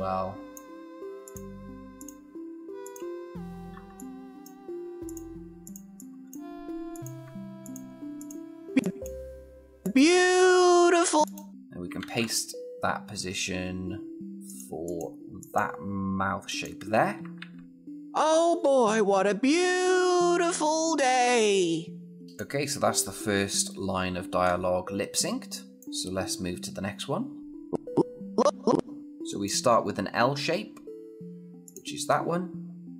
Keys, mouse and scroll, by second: 3.5 F6, 3.7-4.4 click, 5.6 F6, 5.7-6.4 click, 7.4 shift+click, 11.8 ctrl+c, 14.4 click, 17.2 ctrl+v, 17.7 click, 22.1 click, 22.7-24.2 scroll down 1, 25.6 scroll up 1, 25.8 click.